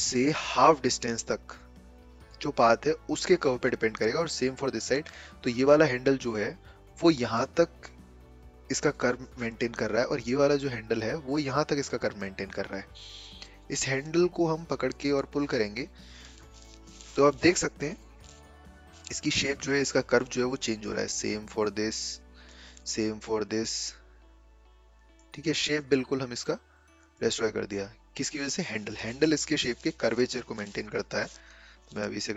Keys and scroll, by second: 30.3 a, 31.3 ctrl+z, 31.7 ctrl+z, 32.0 ctrl+z.